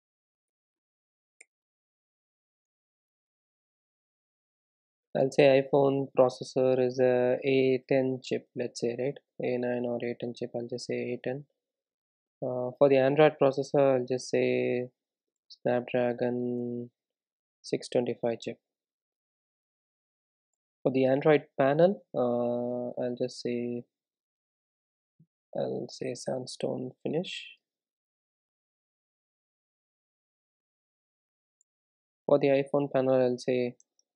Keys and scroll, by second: 5.8 Tab, 7.1 Tab, 11.3 super+e, 12.4 super+e, 17.9 Tab, 27.2 Tab, 29.0 super+e, 32.8 super+e, 33.9 Tab.